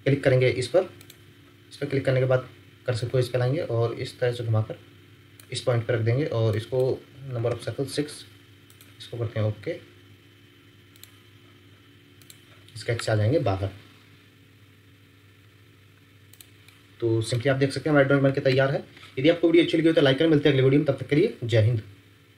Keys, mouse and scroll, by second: 1.8 scroll up 1, 7.5 Return, 16.6 middle click, 18.5 ctrl+7.